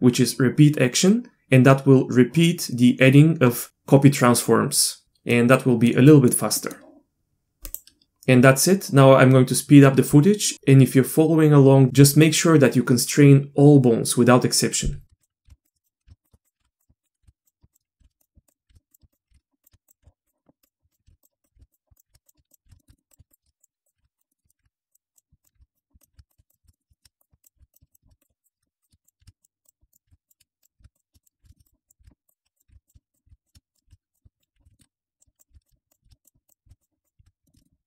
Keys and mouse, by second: 5.0 shift+r, 5.3 middle click, 6.1 middle click, 6.6 middle click, 15.5-20.0 typing, 15.6 click, 15.8 shift+drag, 16.2 click, 16.4 click, 17.4 click, 17.7 drag, 18.2 click, 18.5 shift+drag, 18.9 click, 19.1 shift+click, 19.7 click, 20.9 drag, 21.1-37.2 typing, 21.4 shift+click, 21.7 click, 22.0 click, 22.2 click, 22.8 shift+middle click, 23.1 click, 24.2 click, 24.3 middle drag, 24.9 click, 25.1 click, 25.7 click, 26.3 click, 26.5 shift+click, 26.7 middle click, 26.9 shift+middle click, 27.7 click, 27.9 shift+click, 28.2 click, 28.4 click, 28.8 click, 29.0 click, 29.6 click, 29.9 click, 30.3 click, 30.6 drag, 30.9 click, 31.2 drag, 31.5 middle drag, 31.6 click, 31.9 shift+click, 32.3 click, 32.6 shift+click, 32.8 click, 33.7 shift+click, 34.4 shift+drag, 34.7 shift+middle click, 35.2 click, 35.6 drag, 36.8 click, 37.0 click, 37.4 middle click, 37.6 middle click.